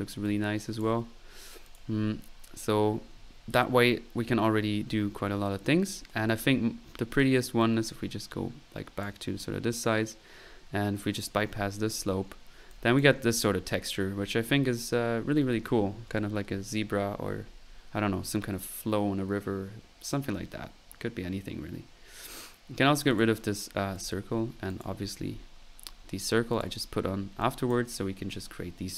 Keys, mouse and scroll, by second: 2.4 typing, 3.4-3.9 middle drag, 7.6-9.2 drag, 11.2 click, 12.7 click, 23.1 click, 24.0 click, 24.3 middle click, 24.7-25.1 drag, 26.5 click, 27.4 click, 27.8 typing.